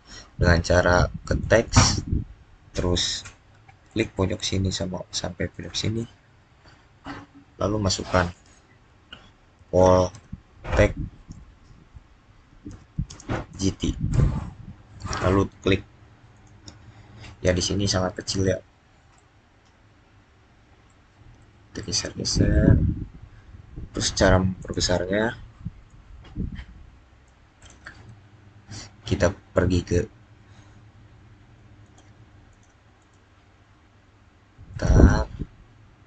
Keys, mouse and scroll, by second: 1.3 click, 3.7 click, 9.2-11.2 typing, 12.3-14.0 typing, 16.2 click, 17.3 scroll up 2, 18.3 middle click, 18.4 scroll up 2, 20.7 middle click, 22.9-24.5 scroll up 2, 24.5 click, 31.7 click.